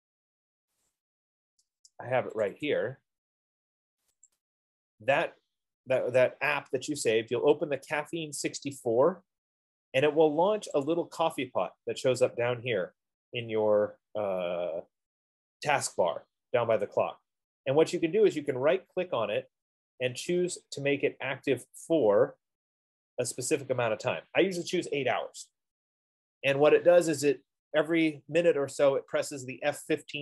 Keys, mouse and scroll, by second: 1.1 click, 1.5 F15, 2.8 click, 3.0 click, 4.5 click, 4.6 click, 11.2-16.3 drag, 19.1-24.0 right drag.